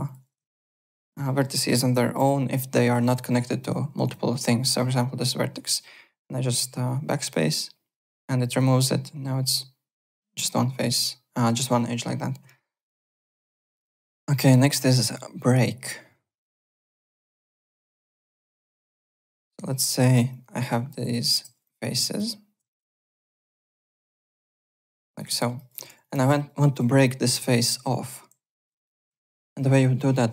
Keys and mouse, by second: 0.0 click, 0.5 ctrl+d, 0.6 w, 0.9 click, 1.2 alt+middle click, 1.4 alt+click, 2.1 y, 2.8 click, 3.0 w, 3.3 alt+middle click, 3.5 alt+right click, 3.9 1, 4.0 click, 4.6 click, 7.5 BackSpace, 8.4 alt+click, 12.3 alt+Tab, 12.7 alt+click, 16.5 click, 16.8 alt+click, 17.2 click, 17.3-18.2 typing, 17.8 click, 18.1 alt+middle click, 18.3 alt+right click, 18.5 alt+middle click, 18.7 alt+click, 19.2-20.2 typing, 19.8 click, 20.3 shift+click, 21.1 click, 21.6 click, 22.1 click, 22.7 click, 23.2 click, 23.8 shift+click, 24.4 click, 25.0 shift+click, 25.3 alt+middle click, 25.5-26.4 typing, 25.5 alt+click, 26.0 click, 26.2 alt+middle click, 26.4 alt+right click, 27.4 click, 28.6 ctrl+click, 28.7 ctrl+z, 29.3 shift+right click.